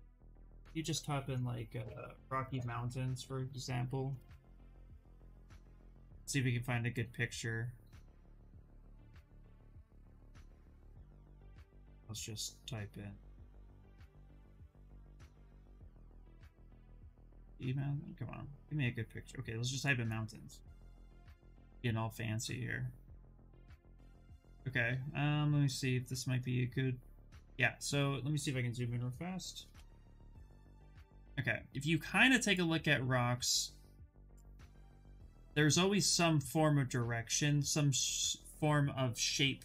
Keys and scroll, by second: 1.3-4.0 typing, 4.5 Return, 15.4 BackSpace, 16.0 s, 16.4 Return, 29.4 ctrl+=.